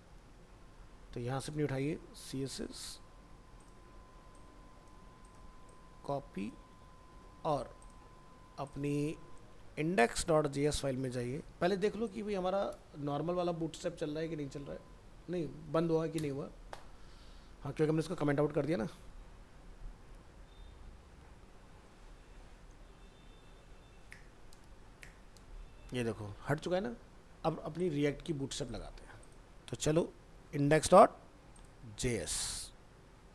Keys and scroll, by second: 6.7 ctrl+c, 9.3 ctrl+s, 9.5 ctrl+w.